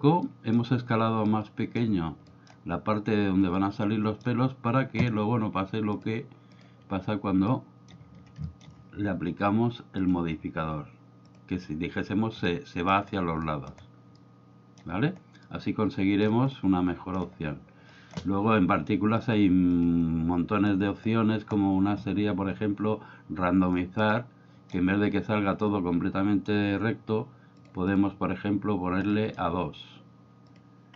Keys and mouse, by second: 0.3 middle click, 1.3 middle click, 2.3 middle click, 3.6 middle click, 5.9-6.6 drag, 7.5-7.9 middle drag, 8.5 shift+middle click, 11.3 click, 12.4 middle click, 13.5 middle click, 14.1-14.7 middle drag, 15.4-16.3 middle drag, 16.5 middle click, 17.8 middle click, 19.2 click, 19.8 drag, 24.0-24.8 middle drag, 27.9 click, 29.1 middle click, 30.5 click.